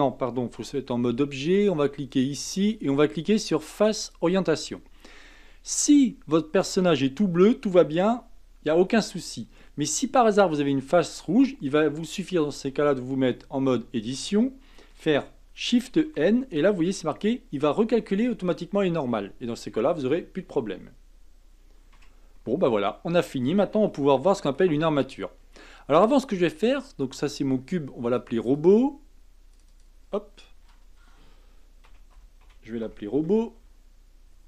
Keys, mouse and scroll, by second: 0.6 Tab, 2.1-4.7 drag, 4.7-7.7 middle drag, 8.8-10.8 scroll up 4, 10.8-12.2 scroll up 1, 12.2-13.2 scroll down 1, 13.2 Tab, 15.8 shift+n, 21.9 Tab, 22.3-22.7 scroll down 2, 22.7-26.9 middle drag, 28.2 click, 28.5 click, 29.5 click, 29.7-32.7 drag.